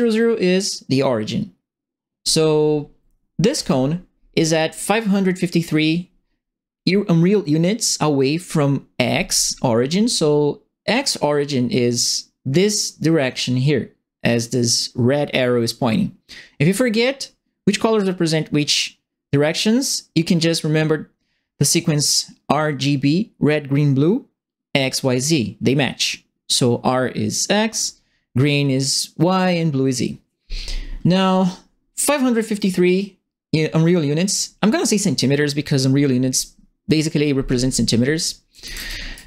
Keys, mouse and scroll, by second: 3.5 click, 37.9-39.2 typing, 38.2-39.2 right drag.